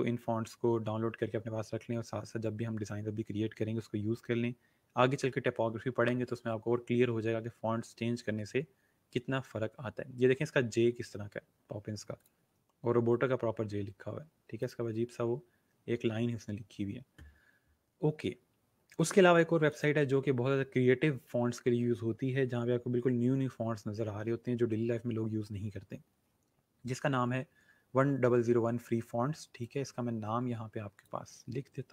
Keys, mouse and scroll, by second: 7.4 scroll down 1, 10.1 scroll up 1, 12.2 click, 12.7 scroll down 1, 13.7 scroll up 1, 14.5 click, 14.9-15.4 scroll down 2, 19.7 click, 20.4-20.8 scroll up 1, 29.5 click.